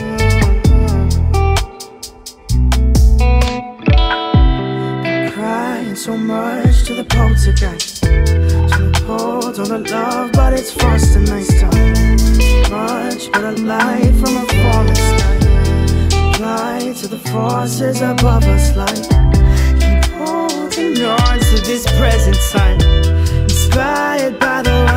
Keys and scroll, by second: 13.6 ctrl+alt+s.